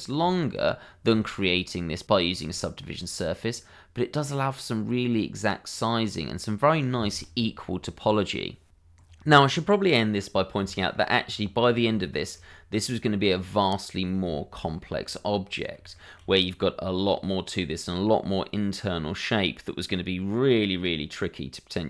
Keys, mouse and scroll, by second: 0.7 shift+middle click, 1.6 middle click, 2.7 shift+middle click, 3.0-3.4 scroll up 1, 3.4 middle click, 9.2 shift+middle click, 10.1 middle click, 10.7 shift+middle click, 11.1 middle click, 12.5 middle click, 14.6-15.1 shift+scroll up 2, 15.1 middle click, 15.9 shift+middle click, 16.3 middle click, 18.1 scroll up 1, 18.4 middle click.